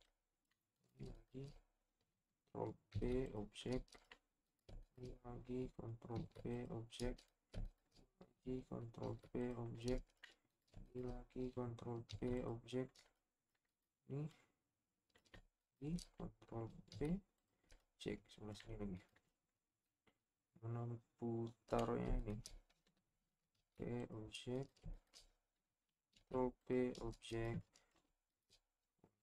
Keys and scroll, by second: 2.9 ctrl+shift+p, 6.2 ctrl+shift+p, 9.0 ctrl+shift+p, 12.1 ctrl+shift+p, 16.9 ctrl+p, 23.5 ctrl+p, 26.1 ctrl+p.